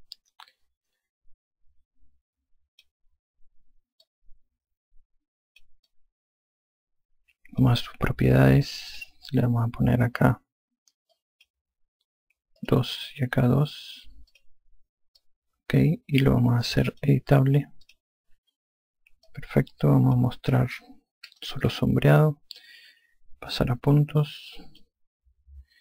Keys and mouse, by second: 4.9 click, 6.7 alt+click, 9.8 click, 12.0 click, 13.5 click, 15.2 click, 16.0 alt+click, 18.7 click, 20.1 alt+click, 21.9-22.9 typing, 25.7 alt+click.